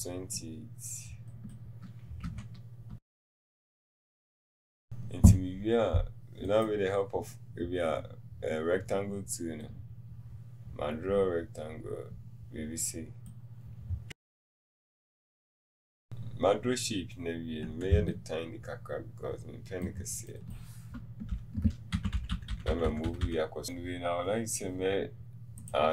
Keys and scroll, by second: 2.4 KP_2.